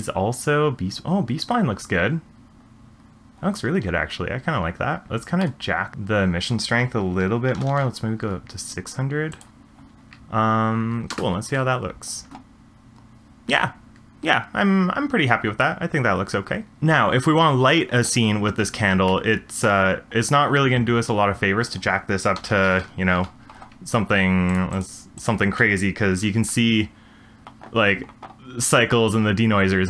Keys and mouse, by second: 5.6 middle click, 5.9-8.2 drag, 7.6 0, 9.3 click, 11.1 space, 16.7 space, 19.1-19.7 middle drag, 21.6-23.2 drag, 22.5 9, 22.6 9, 24.5-26.3 drag.